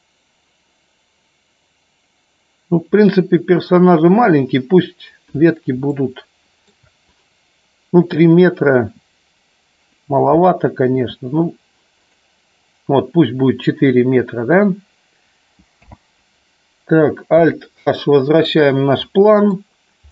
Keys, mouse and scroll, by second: 4.0 click, 5.8-6.7 shift+middle drag, 10.9 s, 17.3 alt+h, 19.0 middle click.